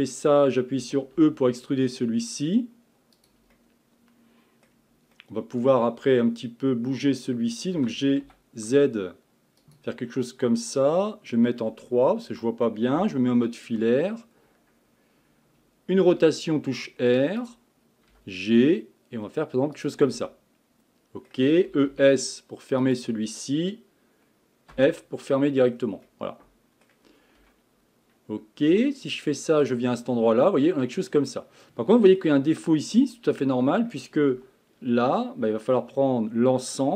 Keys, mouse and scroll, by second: 0.0-1.5 middle drag, 1.5 e, 3.6-7.8 middle drag, 7.8 g, 11.7 KP_3, 13.0 z, 16.1 r, 18.1 g, 20.1-22.1 middle drag, 22.1 e, 25.1 f, 25.7-26.1 scroll down 1, 26.1-27.4 middle drag, 27.4 Tab, 28.7 z, 30.1-31.3 middle drag, 31.3-31.6 scroll down 1, 31.6-32.5 middle drag, 32.5-33.0 scroll up 2, 33.0 click, 33.4-34.3 middle drag, 34.3 Tab, 35.2 middle click, 35.9 scroll up 1, 36.7 scroll down 2.